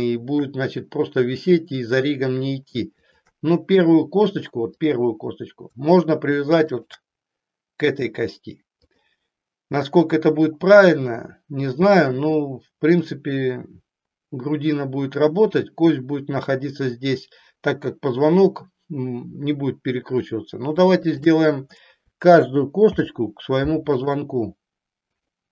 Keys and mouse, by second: 3.1 shift+click, 4.7 click, 6.7 shift+click, 8.8 click, 20.9 shift+click, 22.8 ctrl+p.